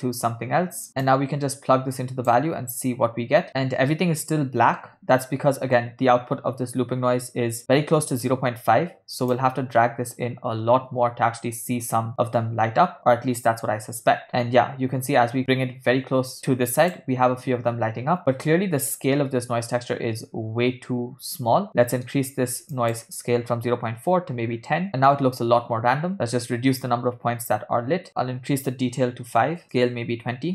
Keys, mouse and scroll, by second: 0.9 middle click, 1.2-3.1 drag, 3.5 space, 9.5-17.1 drag, 21.4 scroll up 1, 21.7 middle click, 23.0-24.9 drag, 26.1 click, 28.1-30.5 drag, 30.1 BackSpace.